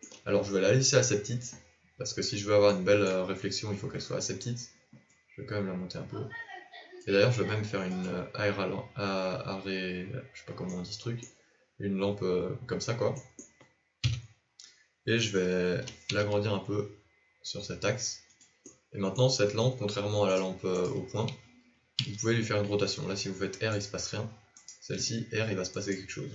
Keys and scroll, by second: 14.0 KP_7, 15.7 s.